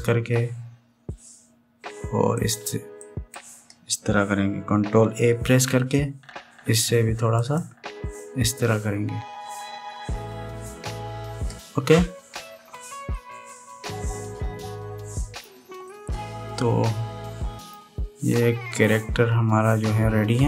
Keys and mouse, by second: 0.3 ctrl+a, 4.0 click, 6.2 ctrl+a, 13.9-16.2 middle drag, 16.6-18.5 middle drag, 19.5-20.4 middle drag.